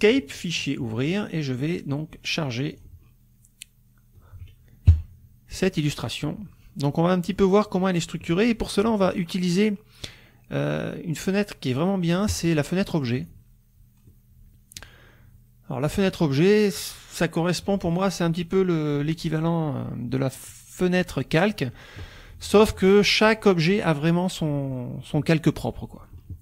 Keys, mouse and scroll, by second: 0.3 click, 1.0 click, 2.7 click, 4.9 KP_Subtract, 6.5 scroll down 2, 6.5 middle click, 6.8 click, 7.0 click, 12.3 click, 13.2 click, 14.1 middle click, 14.1 click, 16.0 click, 21.1 click, 21.5 click.